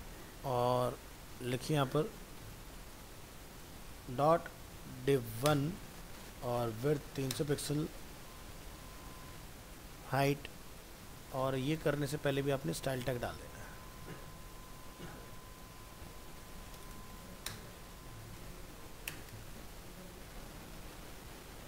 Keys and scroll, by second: 14.4 ctrl+x.